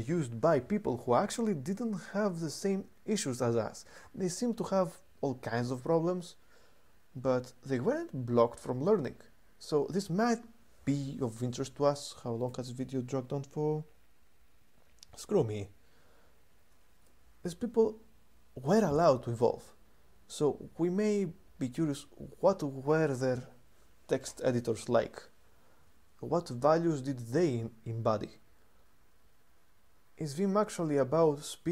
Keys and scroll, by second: 12.3 super+3.